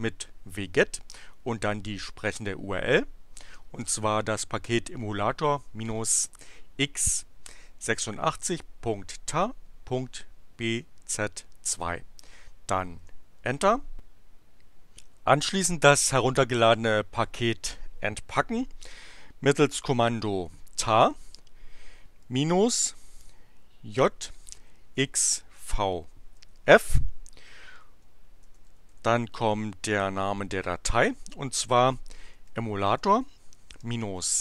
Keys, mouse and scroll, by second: 2.2 click, 11.6 click, 12.9 Return, 19.7-21.0 typing, 22.2 -, 23.9 j, 24.9 x, 25.5 v, 26.3 f, 27.9-29.5 typing, 32.0-34.4 typing.